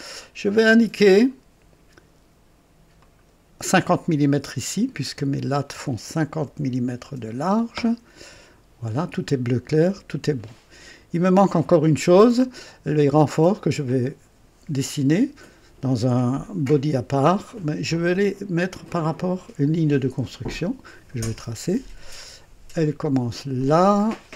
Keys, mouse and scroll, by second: 1.1 click, 3.0 click, 5.1 click, 6.4 KP_5, 7.0 KP_0, 8.1 KP_Enter, 20.5 click, 23.5 click.